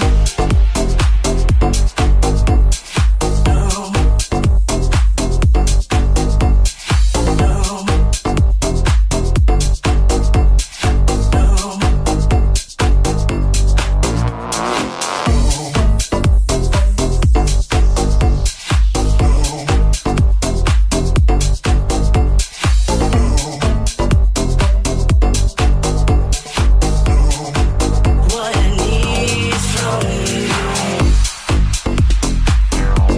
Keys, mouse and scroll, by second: 0.1 middle click, 0.1 right click, 0.5 middle click, 0.5 right click, 1.3 middle click, 1.3 right click, 1.9 middle click, 1.9 right click, 2.3 middle click, 2.3 right click, 2.8 shift+middle click, 2.8 shift+right click, 3.3 m, 6.4-25.1 shift+drag, 13.5 m, 14.4 ctrl+z, 14.9 m, 16.3 middle click, 16.3 right click, 16.8 alt+z, 18.3 middle click, 18.3 right click, 18.6 middle click, 18.6 right click, 19.0 m, 19.5 alt+z, 20.0 middle click, 20.0 right click, 20.4 shift+middle click, 20.4 shift+right click, 20.8 m, 21.4 middle click, 21.4 right click, 21.7 middle click, 21.7 right click, 23.3 middle click, 23.3 right click, 25.2-30.3 drag, 26.3 Tab, 30.3 shift+right click, 31.1-33.1 shift+drag.